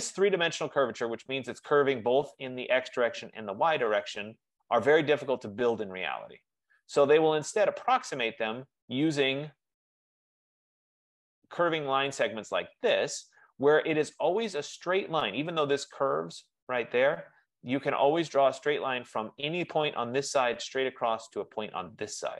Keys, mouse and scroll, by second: 1.4-1.9 scroll, 4.8-5.2 scroll, 8.2 right click, 13.0 right click, 14.8-16.0 scroll, 19.8 F15.